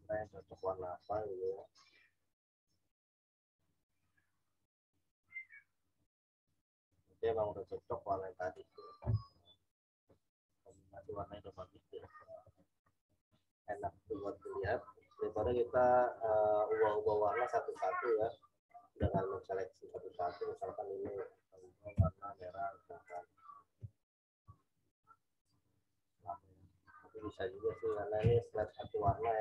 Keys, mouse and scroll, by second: 18.9 w, 19.8 click, 21.9 i, 23.0 click, 23.7 b, 25.9 typing, 27.9-28.7 typing, 28.6 click, 29.0 ctrl+z.